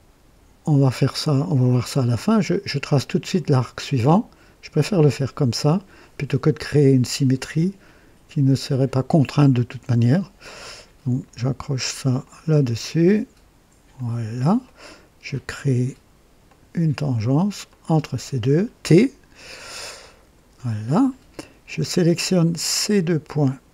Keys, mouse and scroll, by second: 3.2 click, 8.6 click, 12.1 click, 13.8 click, 14.6 right click, 16.4 click, 17.6 click, 19.9 t, 22.7 click.